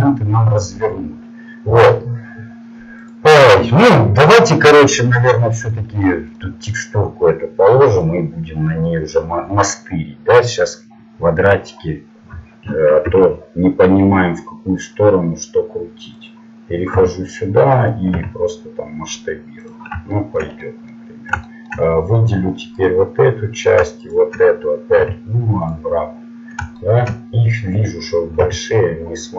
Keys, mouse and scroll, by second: 3.7 click, 11.4 click, 13.1 r, 17.0 g, 18.1 s, 20.1-22.7 middle drag, 22.9-24.5 right drag, 24.9 u, 25.7 u, 28.5 s.